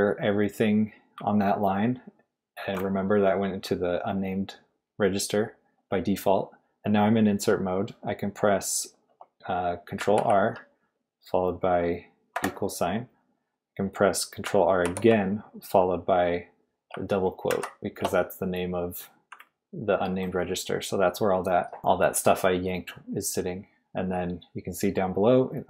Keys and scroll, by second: 10.1 ctrl+r, 12.3 =, 14.8 ctrl+r, 17.5 shift+'.